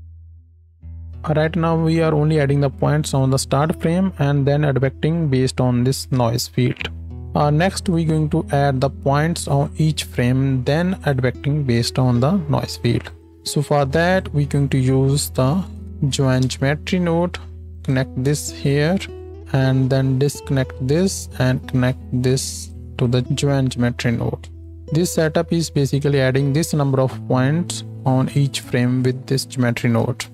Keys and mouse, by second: 0.2-13.2 drag, 0.2 middle click, 0.2 right click, 1.1 ctrl+z, 4.0 space, 6.9 space, 13.2-18.3 shift+middle drag, 13.7 shift+a, 18.3-30.1 drag, 19.3-23.2 middle drag, 19.3-23.2 right drag, 23.6-24.8 middle drag, 23.6-24.8 right drag, 25.0-30.1 middle drag, 25.0-30.1 right drag.